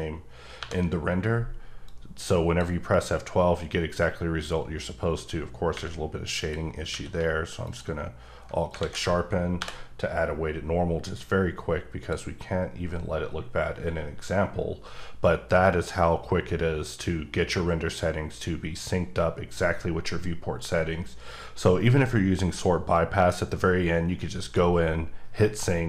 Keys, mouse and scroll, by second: 0.6 F12, 1.8 click, 6.4 click, 6.9 q, 7.6 alt+click, 8.8 alt+a, 9.6 F12, 11.0 click.